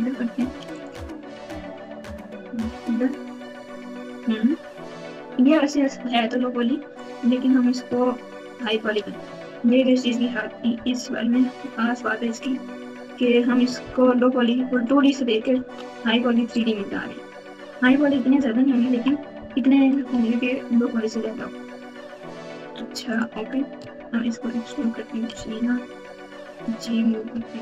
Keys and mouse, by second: 1.3 g, 7.8 s, 9.0 e, 10.7 g, 13.8 r, 15.5 s, 18.3 ctrl+KP_2, 18.9 ctrl+KP_2, 19.0 ctrl+KP_2, 20.1 g, 23.9 e, 25.3 g, 27.3 s.